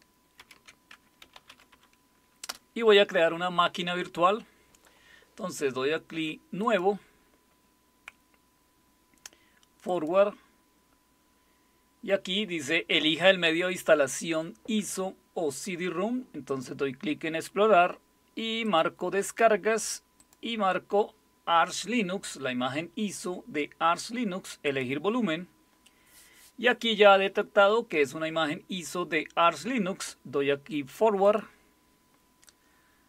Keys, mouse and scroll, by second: 0.4 alt+super+r, 1.0-2.2 typing, 2.5 Return, 6.6 click, 9.8 click, 16.4 click, 18.6 click, 20.2 click, 24.7 click, 31.2 click.